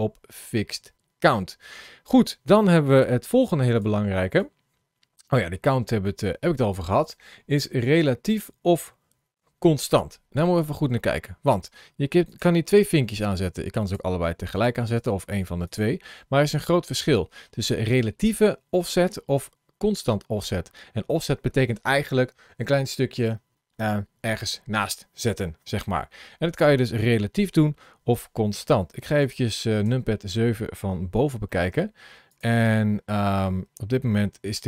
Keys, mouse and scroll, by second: 12.1 click, 13.3 click, 13.7 click, 14.4 click, 14.9 click, 15.5 click, 29.0 click, 29.7 KP_7, 31.1 scroll up 1, 31.3 shift+middle click, 32.1 click.